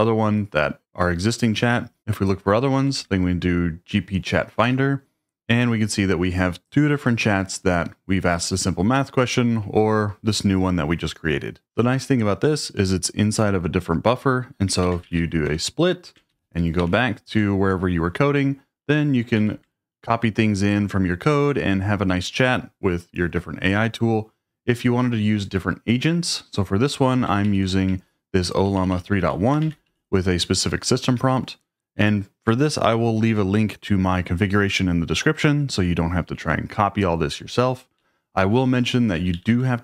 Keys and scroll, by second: 1.7-2.5 typing, 2.8 Tab, 2.9 Tab, 4.6 Return, 14.6-16.0 typing, 16.3 ctrl+o, 16.8 ctrl+o, 19.4 ctrl+l, 27.5 ctrl+h, 27.9-30.5 typing, 31.2 Escape, 38.0-39.8 typing.